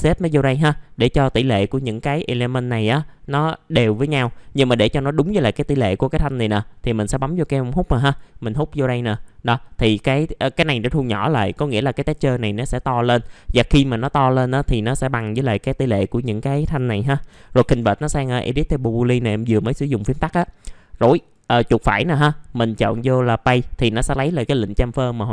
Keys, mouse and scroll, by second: 1.1 middle click, 1.2-3.4 scroll down 1, 3.4 middle click, 4.1 F4, 4.6-5.8 scroll down 1, 6.8 click, 9.4 middle click, 14.7 scroll down 1, 15.2 alt+middle click, 19.7 alt+middle click, 21.1 right click, 22.0 click.